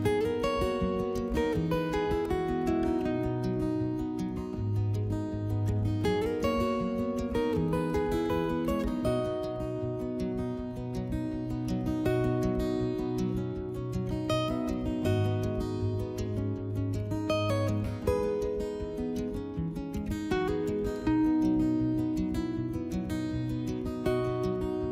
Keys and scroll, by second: 9.8 2, 15.7 3.